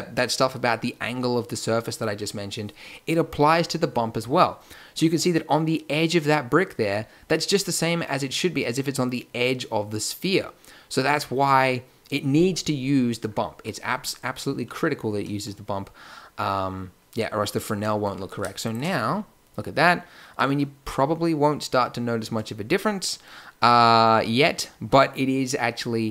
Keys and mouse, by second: 4.2 click, 11.2 click, 18.6-20.3 drag.